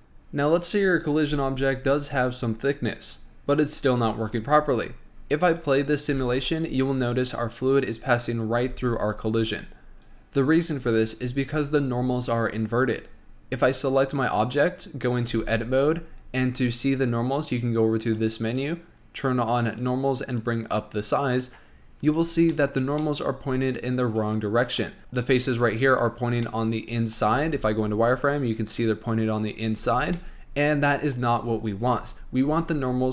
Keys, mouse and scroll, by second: 0.0-2.5 shift+middle drag, 5.7 click, 6.3 space, 8.6 scroll up 1, 8.8 space, 9.7 click, 13.8 click, 14.5 click, 15.6 Tab, 18.3-21.3 drag, 22.2 scroll up 3, 22.7-25.0 shift+middle drag, 25.4 click, 25.7 click, 26.1 click, 26.5 scroll down 1, 26.7 middle click, 27.6 z, 30.0 z, 30.4-32.2 middle drag, 32.2 Tab.